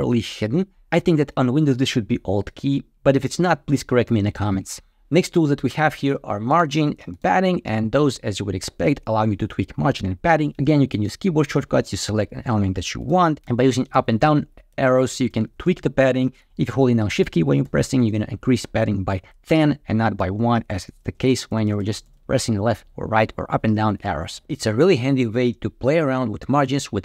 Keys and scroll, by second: 13.1 shift+Down, 13.4 shift+Up, 13.8 shift+Down, 14.6 shift+Up, 15.2 shift+Left, 17.1 shift+Left, 20.3 Left.